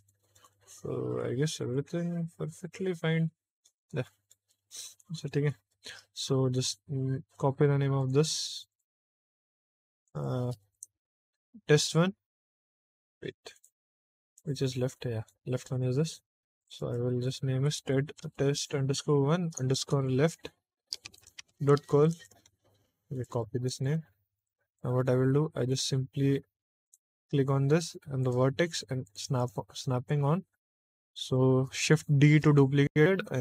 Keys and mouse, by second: 0.0 shift+middle click, 0.4 middle click, 1.5-3.6 middle drag, 4.0 middle click, 4.4 shift+middle click, 5.0 middle click, 5.6 shift+middle click, 7.9 click, 8.6 click, 9.9 click, 10.0-13.5 drag, 14.2 click, 14.9 middle click, 16.5 click, 16.7-22.2 drag, 23.0 click, 23.2-24.3 ctrl+drag, 24.6 click, 24.9 middle click, 25.2 middle click, 25.4 middle click, 26.8-29.0 drag, 29.3 click, 29.9 shift+middle click, 30.4 middle click, 31.5 shift+middle click, 32.2 shift+d, 33.0 x.